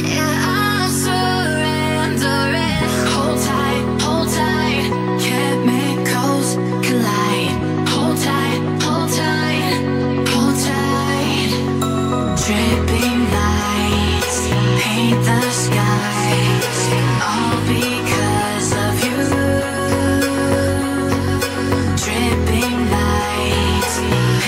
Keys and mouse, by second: 1.3 click, 2.3-5.0 drag, 6.0-8.9 drag, 9.7-12.4 drag, 11.7 l, 13.8-16.7 drag, 15.8 BackSpace, 15.9 BackSpace, 17.9-18.9 middle drag, 21.1-22.0 drag, 22.5 middle click, 24.0-24.4 drag.